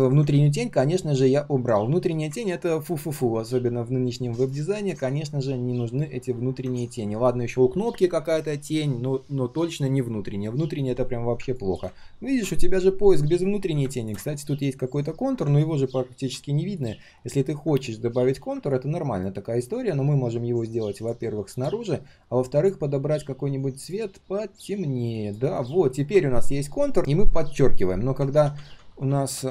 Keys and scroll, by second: 28.3 ctrl+z, 28.5 ctrl+z, 28.7 ctrl+z.